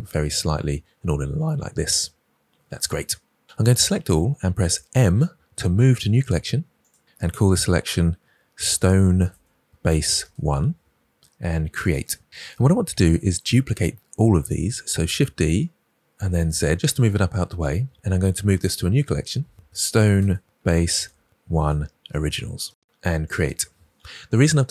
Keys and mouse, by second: 4.9 m, 15.0 shift+d, 16.1 z, 17.0 drag, 18.6 m.